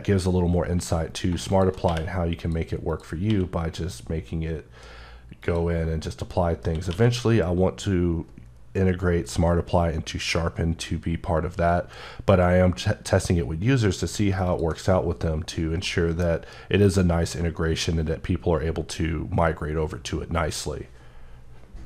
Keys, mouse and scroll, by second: 1.0 shift+click, 1.6 q, 2.2 click, 2.7 click, 3.0 q, 5.2 click, 6.7 q, 14.1 q, 14.3 click, 15.6 middle click, 16.1 scroll down 1, 16.7 scroll, 16.8-18.9 scroll up 2.